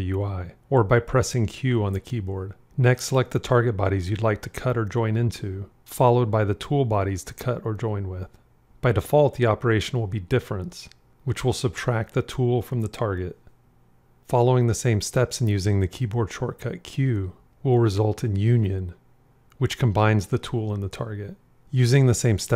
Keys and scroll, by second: 1.1 q, 13.8 q, 18.2 q, 21.8 q.